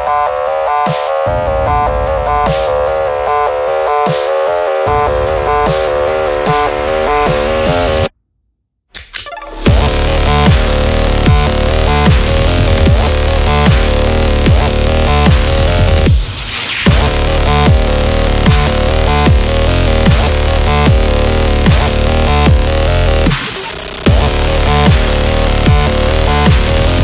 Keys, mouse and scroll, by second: 9.1 ctrl+c, 9.3 ctrl+v, 10.5 click, 10.9 scroll down 1, 11.3 space, 11.3 click, 11.5 space, 14.7 click, 19.8 click, 22.0-24.1 typing, 25.2 Return, 26.5 click.